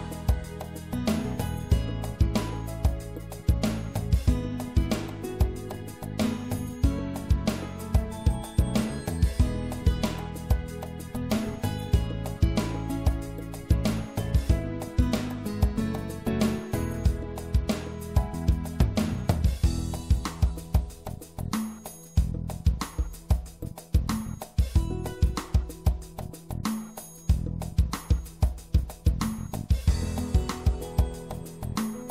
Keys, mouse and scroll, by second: 0.4-2.4 drag, 4.7 right click, 7.3 w, 8.9 w, 10.3 w, 12.4 middle click, 17.7 c.